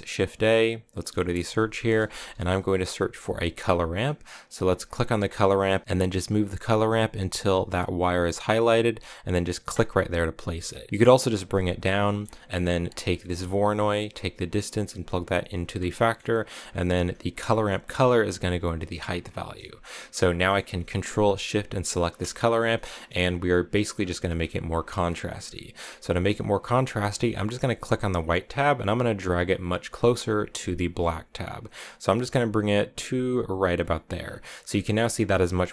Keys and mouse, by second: 7.5-9.7 middle drag, 10.8-11.8 drag, 11.9 middle click, 12.7 click, 15.9 middle click, 16.3 click, 17.4 middle click, 18.9 click, 19.5 middle click, 20.3 middle click, 21.6 ctrl+shift+click, 22.6 shift+click, 24.8 middle click, 25.4 middle click, 27.4-33.7 drag.